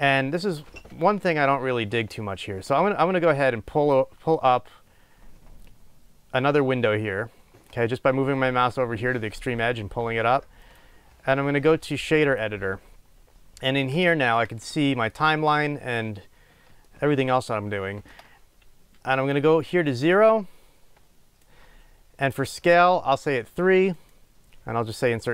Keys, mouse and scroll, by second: 4.5-19.6 drag, 20.0-25.3 right drag.